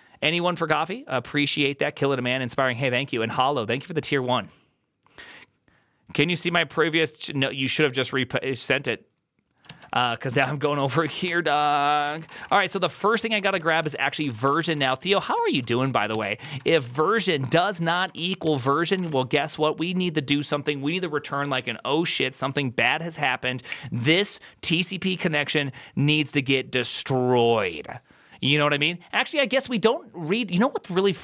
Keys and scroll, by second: 10.2 alt+{, 10.2 ctrl+c, 10.3-19.5 typing.